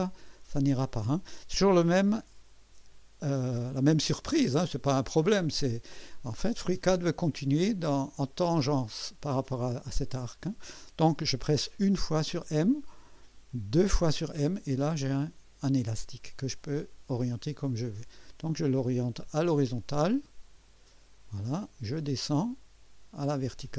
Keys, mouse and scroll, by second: 11.8 m, 13.8 typing, 21.1 click.